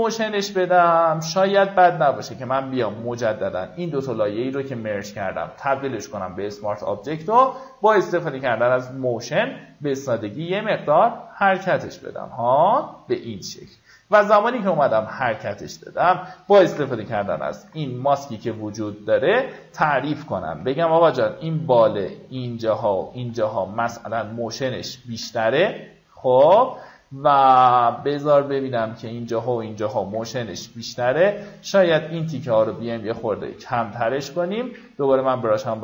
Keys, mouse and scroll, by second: 2.8 right click, 5.2-11.1 drag, 17.3 b, 18.0 alt+right click, 18.5-21.1 drag, 21.1 x, 21.4-24.0 drag, 24.4 x, 25.9 x, 30.7 KP_6, 31.6 click, 32.6 x, 33.0 click, 34.6-34.9 alt+scroll up 1, 35.3 alt+x, 35.7 click.